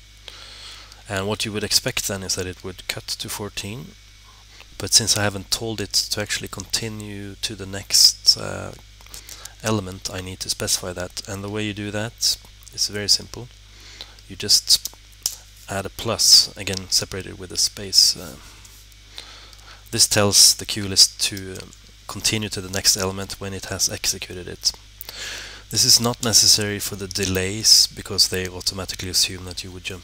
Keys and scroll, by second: 1.3-2.2 typing.